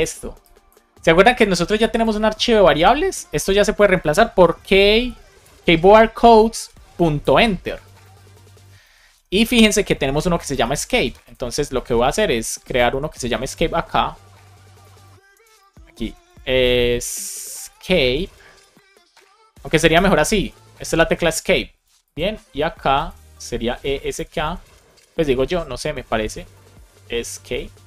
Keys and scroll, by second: 5.2 BackSpace, 5.8 Down, 6.2 Return, 7.8 shift+Right, 9.1 BackSpace, 12.8 super+c, 14.9 super+v, 15.5 alt+shift+Left, 16.3-18.6 typing, 19.6 BackSpace, 21.7 super+Caps_Lock, 23.4 Return, 23.5-26.2 typing.